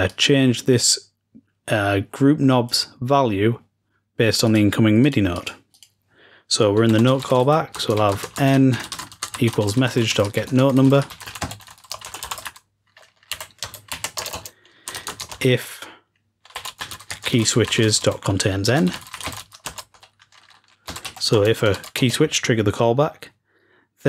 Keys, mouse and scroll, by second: 0.0-8.2 drag.